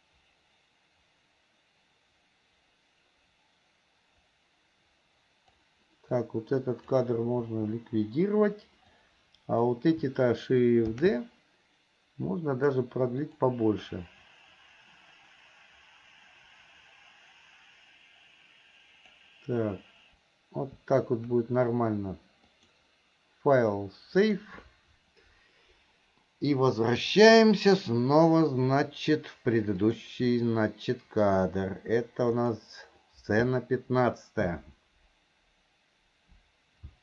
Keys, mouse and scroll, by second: 6.4 click, 9.1 click, 14.1-19.4 drag, 25.8 click, 30.0-37.0 drag.